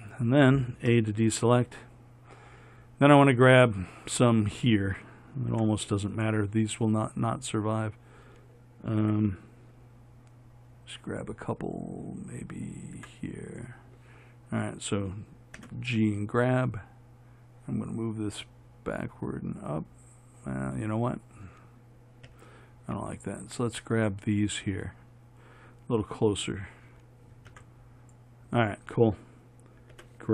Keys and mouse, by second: 1.1 a, 5.7 b, 9.2 a, 13.2 b, 15.8 g, 22.5 a, 27.7 b, 30.2 g.